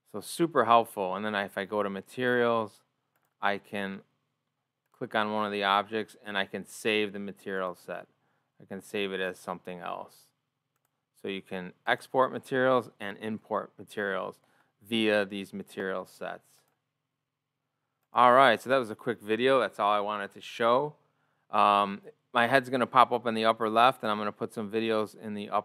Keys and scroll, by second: 0.7 o.